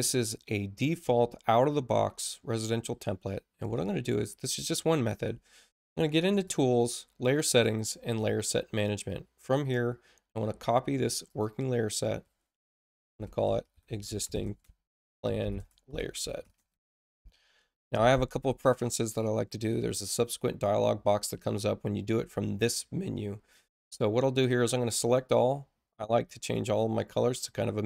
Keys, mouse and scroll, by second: 6.3 click, 8.0 click, 11.2 click, 12.8-17.7 typing, 18.8 click, 25.0 click, 26.4 click, 27.4 click.